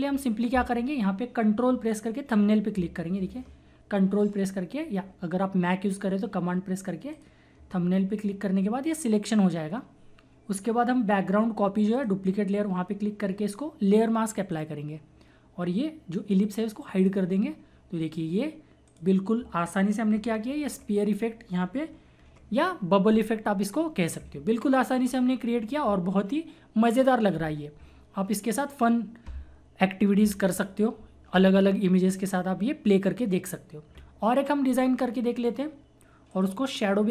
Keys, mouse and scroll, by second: 6.0 typing, 7.1 ctrl+click, 9.7 typing, 11.9 click, 11.9 typing, 14.2-14.5 typing, 14.5 click, 17.0 click, 20.5 ctrl+=, 35.3-37.1 drag.